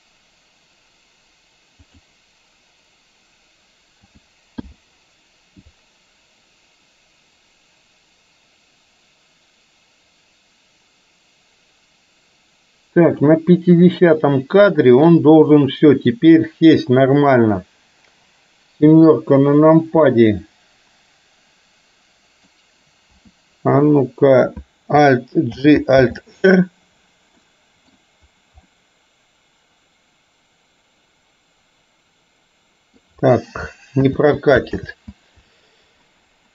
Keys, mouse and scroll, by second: 4.1 a, 4.8 i, 5.9-13.4 drag, 13.9-15.1 middle drag, 16.0 click, 18.9 KP_7, 20.1-22.5 middle drag, 23.1 KP_7, 25.6 alt+g, 26.0 alt+r, 27.5-28.0 middle drag, 28.8-33.0 middle drag, 34.1 ctrl+z, 34.9 ctrl+z.